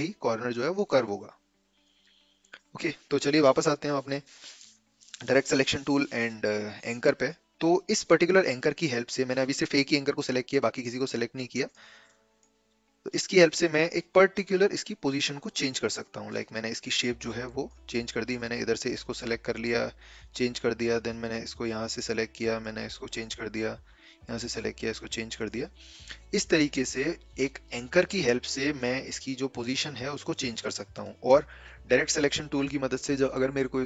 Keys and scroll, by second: 4.9 a.